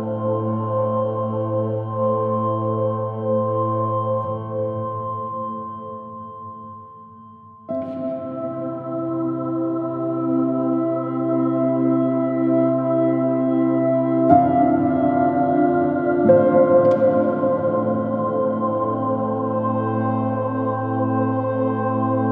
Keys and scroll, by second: 4.0 super++, 4.2 super+space, 8.2 super+z, 8.3 super+z, 12.4 space, 14.2 s, 18.8 space, 22.0 space.